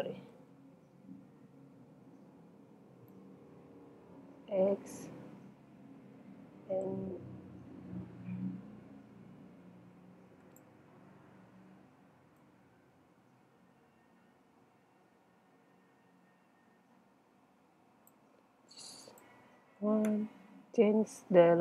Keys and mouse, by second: 0.3 super+z, 1.8-3.2 middle drag, 3.2 click, 3.7 click, 12.4-14.4 drag, 19.1-21.1 drag.